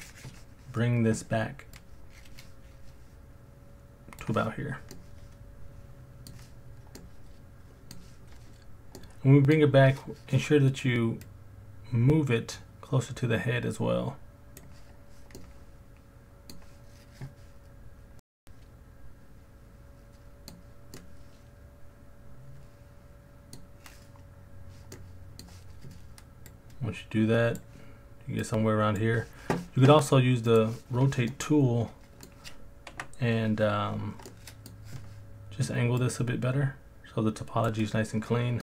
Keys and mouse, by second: 4.9-6.3 middle drag, 7.0 middle click, 9.0 middle click, 11.2 click, 11.6 click, 15.4 middle click, 16.1 middle click, 18.2-19.7 middle drag, 19.7 middle click, 20.9-23.5 middle drag, 24.9 middle click, 26.5 click, 28.4 click, 30.5 click, 31.3 middle click, 32.9 KP_Decimal, 34.3 middle click, 36.0 click, 38.6-38.7 middle drag.